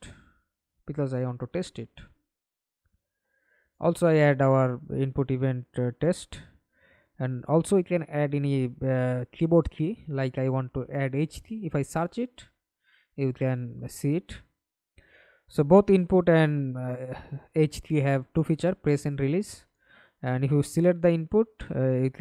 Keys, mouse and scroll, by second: 0.6-3.7 typing, 3.7 Return, 5.9 right click, 6.4 right click, 9.5 h, 9.7 space, 9.9 k, 10.6 y, 14.5 right click.